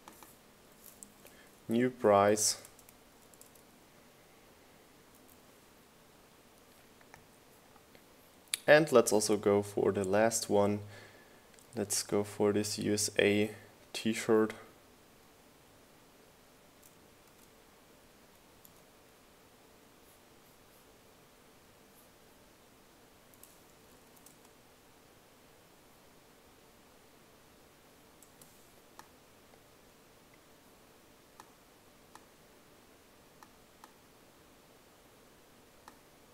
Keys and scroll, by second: 1.4 Left, 2.1 Right, 4.1 BackSpace, 5.8-6.8 typing, 18.2 BackSpace, 20.5 super+v, 24.5-25.5 typing.